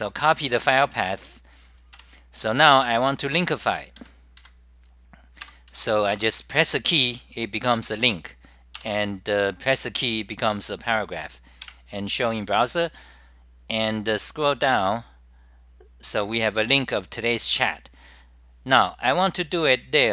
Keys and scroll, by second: 5.2-5.9 typing, 8.2-8.9 typing, 10.7-11.9 typing, 11.7 super+r, 13.8 2.